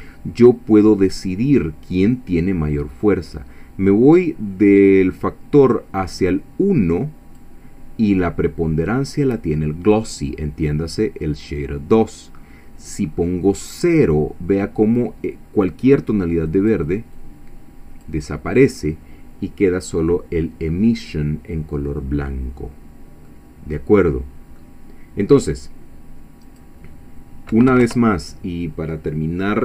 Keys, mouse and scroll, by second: 5.6-7.6 drag, 16.5 click, 17.2-18.2 drag, 22.3-23.0 scroll down 4, 23.3-24.8 middle drag, 26.4-27.5 drag, 27.5 ., 27.7 5, 27.8 Return.